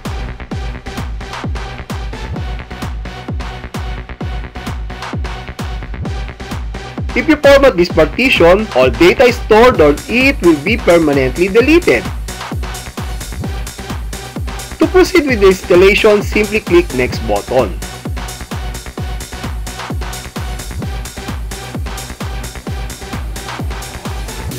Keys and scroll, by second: 9.3 Left, 11.7 space.